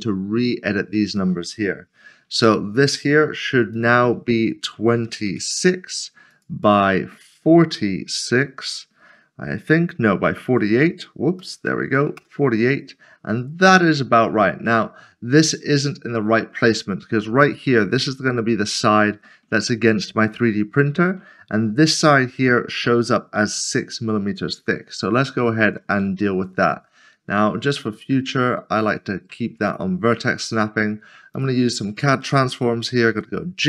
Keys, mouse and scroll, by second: 3.7 right click, 5.1 typing, 6.3 click, 6.6 double click, 11.6 typing, 12.1 Return, 13.4 click, 13.9 scroll up 1, 14.6 scroll up 1, 14.8 middle click, 15.8 shift+middle click, 24.9 shift+middle click, 26.0 scroll up 1, 27.9-31.3 scroll up 1, 31.3 click, 33.1 typing.